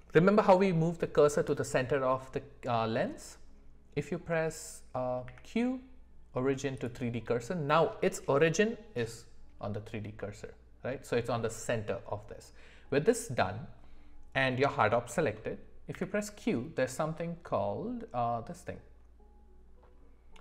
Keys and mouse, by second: 5.2 q, 10.2-11.4 middle drag, 15.9 q.